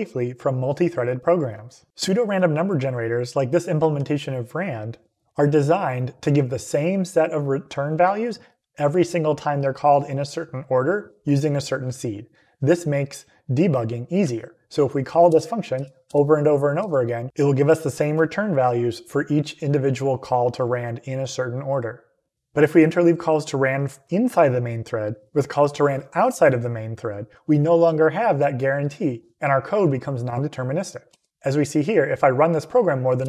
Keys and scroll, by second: 15.2 Return, 15.6 Up, 15.9 Return, 16.7 Up, 17.2 Return, 31.0 Up, 33.1 Return.